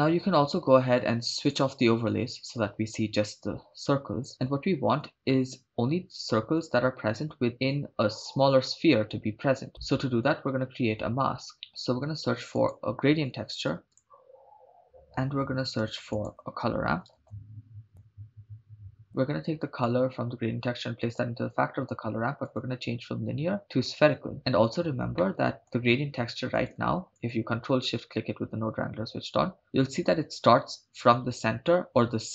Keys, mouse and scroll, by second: 1.5 click, 10.9-11.5 scroll down 5, 11.5 click, 12.5 shift+a, 14.8 middle click, 14.8 scroll up 5, 15.9 shift+a, 19.8-21.2 drag, 22.4-24.1 drag, 25.2 middle click, 26.6 click, 27.6 ctrl+shift+click.